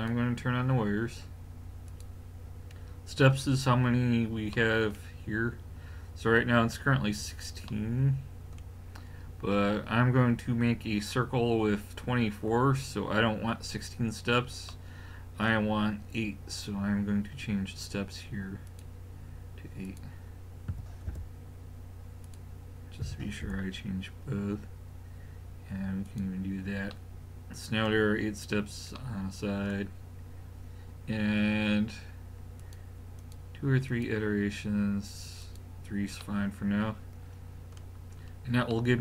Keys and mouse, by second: 4.6-14.9 middle drag, 16.9-18.7 middle drag, 18.7-21.8 drag, 21.8 middle click, 22.2 click, 24.1 middle drag, 26.1 click, 26.9-27.4 middle drag, 27.4 click, 27.5 middle click, 27.6 click, 27.8-29.0 middle drag, 32.6-36.3 drag, 36.3-37.2 middle drag.